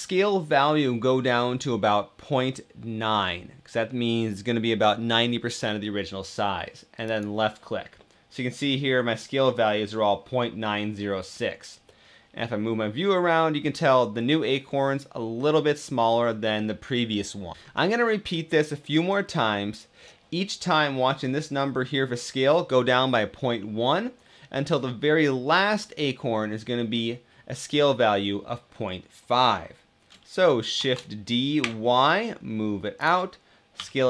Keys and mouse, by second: 11.6-17.5 middle drag, 30.5 shift+d, 31.4 y, 33.5 s.